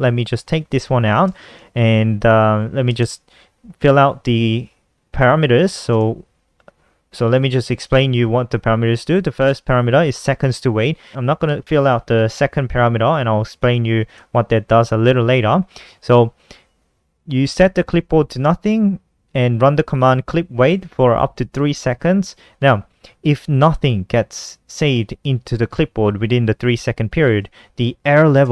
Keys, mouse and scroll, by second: 0.1 Down, 1.5 ,, 8.5-9.4 typing, 13.0 Return, 26.9-28.5 typing.